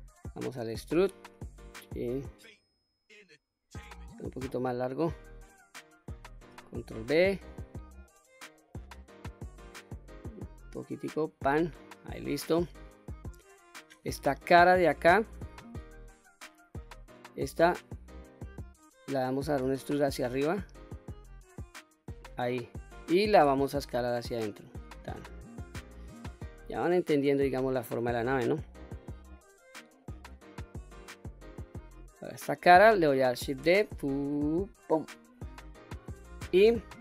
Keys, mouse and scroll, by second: 0.7 e, 4.6 click, 5.5-6.3 middle drag, 7.0 ctrl+b, 11.4 click, 11.9-12.3 middle drag, 12.6-13.3 middle drag, 14.3 e, 14.8 click, 15.8 3, 16.0 click, 16.8-18.8 middle drag, 19.7 e, 22.2 click, 22.6 middle click, 23.5 s, 24.8 click, 25.2-25.6 scroll down 2, 25.6-29.1 middle drag, 29.4 scroll up 2, 30.1-31.8 middle drag, 32.1 click, 32.7 middle click, 33.7 shift+d, 34.9 right click, 35.9-36.7 middle drag.